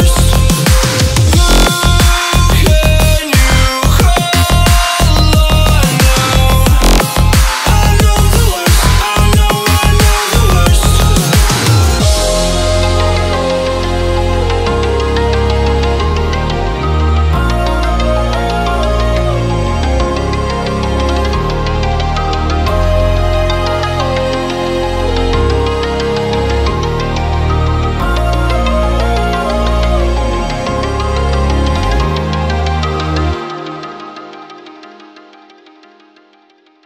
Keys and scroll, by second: 6.0 ctrl+a, 27.6 alt+a.